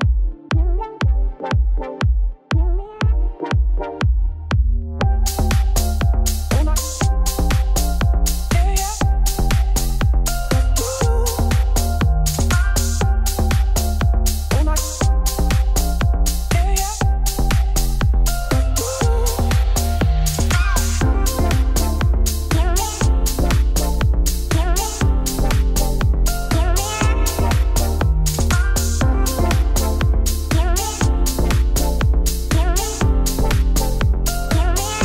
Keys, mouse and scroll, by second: 0.4 click, 0.7 KP_Decimal, 1.2 middle click, 1.4 ctrl+1, 2.9 click, 3.6 middle click, 4.2-5.6 drag, 6.1 click, 6.5 click, 7.1 Tab, 8.4 middle click, 8.8 scroll up 3, 8.9 middle click, 9.3 Tab, 11.6 click, 12.0 middle click, 13.0-14.2 drag, 14.2 middle click, 14.9 ctrl+s, 15.2 click, 16.4 click, 17.0-17.6 scroll down 11, 17.6 shift+middle click, 18.4-18.8 scroll up 1, 18.8 click, 19.5 scroll down 8, 19.7-20.0 scroll up 2, 20.0 shift+click, 20.7 ctrl+l, 21.2 click, 21.6 KP_Decimal, 24.2-25.2 drag, 25.9 click, 26.7 right click, 27.4 middle click, 28.1 click, 28.5 shift+click, 29.3-30.6 drag, 30.6-31.1 scroll up 1, 31.1 click, 31.5-32.7 drag, 32.9 click, 33.7 right click, 34.3 click, 34.7 Tab.